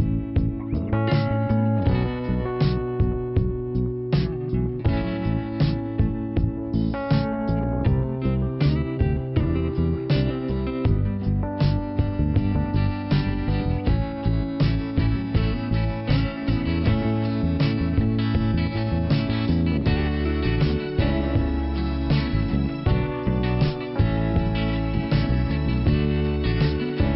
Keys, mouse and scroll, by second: 1.4 click, 5.6 click, 6.2 scroll down 1, 8.5 middle click, 11.9 click, 12.4 click, 15.1 click, 16.3 scroll up 1, 17.2 click, 21.1 click, 25.1 click, 25.4 click, 25.9 click, 26.5-27.1 scroll down 2.